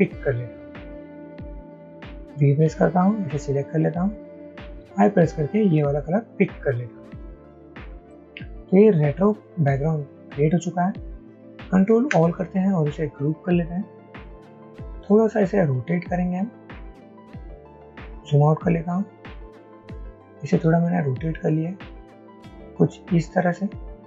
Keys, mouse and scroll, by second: 2.2-3.1 typing, 8.0 typing, 9.9-13.7 typing, 17.9 alt+scroll down 1.